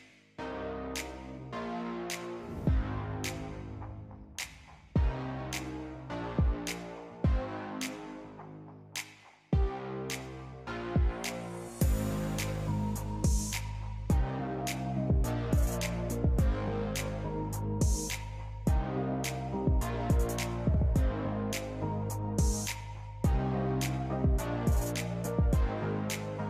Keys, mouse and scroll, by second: 0.7 click, 2.3 Tab, 4.2 click, 5.2 click, 6.8 g, 10.3-11.7 scroll up 6, 11.7 g, 13.1-13.7 scroll down 3, 13.7-14.8 drag, 14.8-15.7 scroll up 2, 15.7 g, 18.3-18.7 scroll down 3, 18.7 click, 19.6 click, 20.2 scroll up 2, 20.4-21.0 scroll down 3, 21.0 click, 22.2 g, 25.4 click.